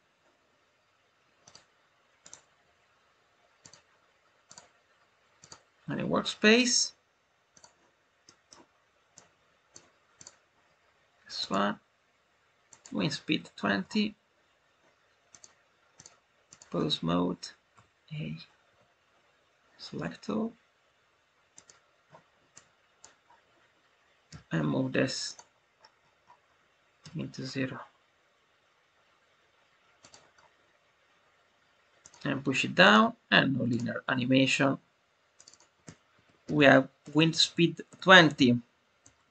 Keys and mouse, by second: 1.4 click, 2.2-3.6 right drag, 4.4-5.4 drag, 7.4 click, 9.1 click, 10.1-12.7 drag, 15.2 click, 15.9-16.5 drag, 21.4 click, 22.4-23.0 drag, 25.2 click, 29.9 click, 31.9 click, 32.7-33.7 drag, 35.3 click, 35.5-39.3 drag, 37.1 BackSpace.